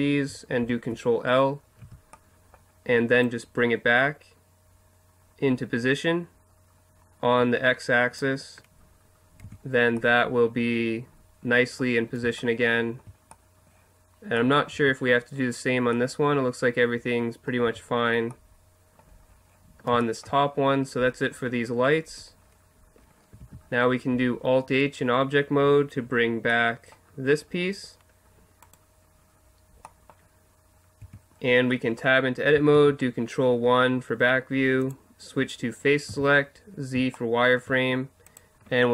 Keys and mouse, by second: 0.6 ctrl+l, 1.8 z, 3.2 middle click, 8.4 middle click, 9.4 Tab, 14.7 Tab, 17.6 Tab, 23.4 alt+h, 28.7-30.4 right drag, 31.0 Tab, 32.7 ctrl+KP_1, 36.1 z, 36.8-38.4 middle drag.